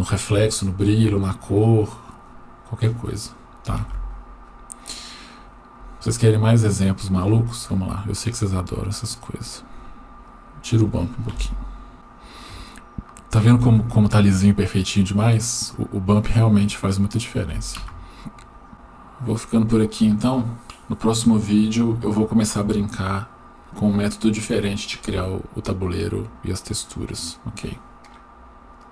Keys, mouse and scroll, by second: 6.8 drag, 8.8-9.7 scroll down 1, 10.3 click, 11.4 Delete, 11.9 scroll down 1, 12.7 shift+middle click.